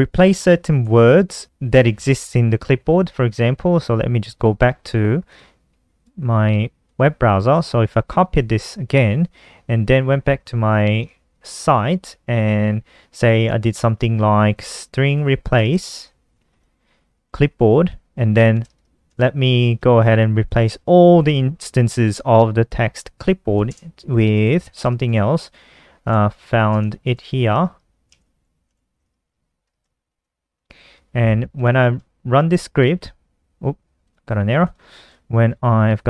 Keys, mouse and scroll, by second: 0.2 n, 3.2 ctrl+KP_1, 4.7 click, 5.4 click, 6.2 click, 7.3 ctrl+c, 9.4 ctrl+KP_2, 10.4 click, 10.9 Up, 11.5 ctrl+Right, 11.7 ctrl+Right, 13.8-16.4 typing, 16.7 ctrl+Right, 17.8 shift+End, 18.0-21.2 typing, 22.9-27.6 typing, 30.9 click, 31.4 ctrl+s, 32.4 F5, 33.4 click, 34.7 Left, 34.8 Left, 35.4 ctrl+Left, 35.6 ctrl+Left, 35.7 ctrl+Left.